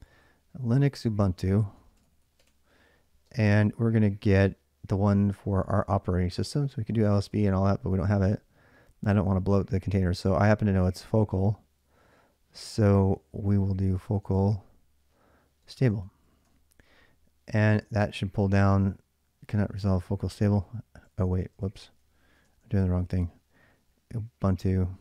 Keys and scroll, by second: 0.0-3.1 typing, 7.0-7.8 typing, 13.5-16.7 typing, 17.7 Return, 20.8-23.2 typing.